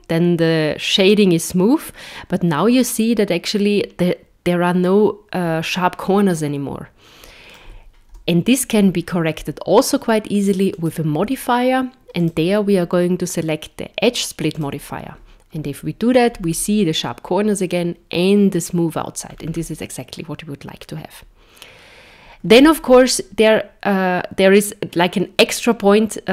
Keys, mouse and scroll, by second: 0.8 middle click, 8.1 KP_0, 10.7 click, 12.2 click, 16.3-17.5 scroll up 5, 19.3 scroll down 4.